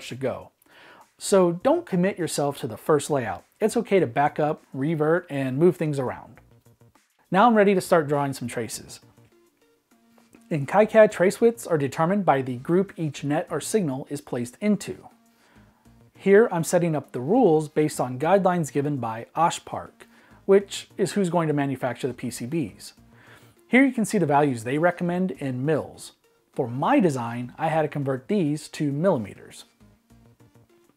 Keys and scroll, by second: 18.6-20.7 typing, 22.2 Right, 22.5 Right, 22.6 Right, 22.8-27.3 typing.